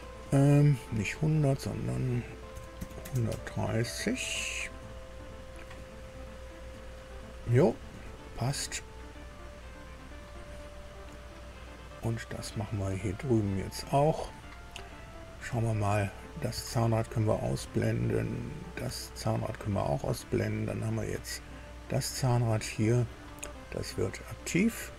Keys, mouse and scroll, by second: 1.5 click, 2.5 KP_1, 3.0 KP_3, 3.0 KP_0, 4.8-7.8 drag, 8.1 scroll down 2, 8.6 scroll down 2, 9.2-10.3 drag, 11.6-13.0 drag, 13.4-13.7 scroll up 1, 16.0 click, 16.5 space, 18.4 click, 18.8 space, 20.1-20.6 scroll down 2, 21.4 click, 22.6 click.